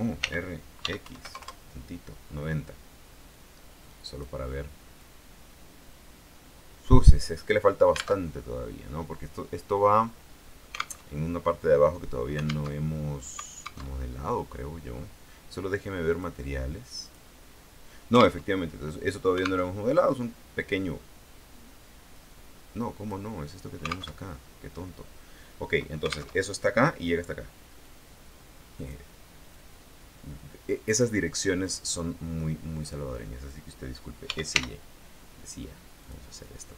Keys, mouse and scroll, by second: 0.4 r, 1.0 x, 1.2 KP_9, 1.4 KP_0, 1.6 KP_Enter, 3.5-4.6 drag, 5.2-7.4 drag, 8.4 alt+Tab, 11.2 alt+Tab, 12.9 alt+Tab, 14.1 alt+Tab, 14.7 scroll up 2, 15.1 scroll down 2, 16.2 click, 17.2 click, 18.6 alt+Tab, 19.8 alt+Tab, 22.3-23.5 drag, 24.3 alt+Tab, 26.4 alt+Tab, 28.0-29.2 drag, 29.7-31.4 drag, 32.0-33.2 drag, 34.4 s, 34.7 y, 36.2 click.